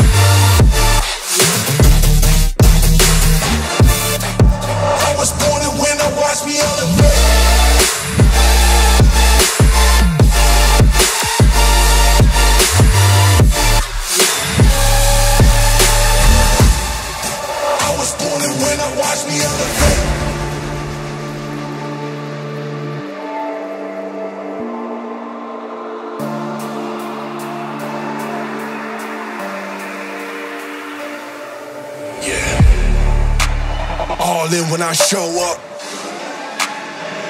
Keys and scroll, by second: 0.2 [, 1.6 ctrl+z, 17.6 ctrl+z, 17.6 ctrl+-, 28.1 ], 28.3 ], 30.3 ], 32.6 [, 32.9 [, 35.2 ], 36.0 ], 36.2 [, 36.4 [.